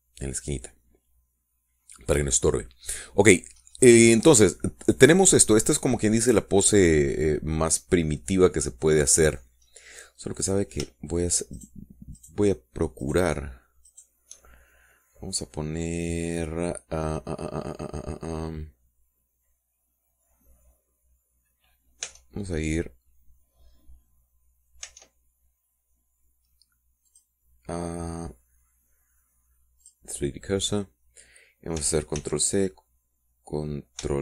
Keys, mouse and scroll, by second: 4.1-4.4 scroll down 2, 4.8-5.3 scroll up 2, 5.3 scroll down 2, 6.3-8.4 middle drag, 8.4 click, 9.0-10.7 middle drag, 10.8-11.1 scroll up 2, 11.6 click, 12.7 shift+click, 13.3 shift+click, 14.2 shift+click, 15.0 shift+click, 23.2 Tab, 26.0 Tab, 28.2 click, 31.0 click, 33.3 ctrl+c.